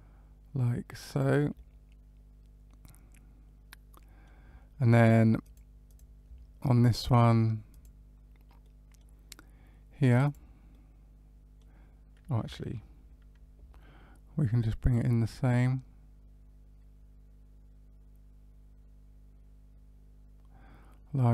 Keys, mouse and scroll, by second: 1.5 middle click, 5.4 click, 5.8 click, 7.7 click, 8.6 middle click, 10.2 click, 10.6 middle click, 14.8 click.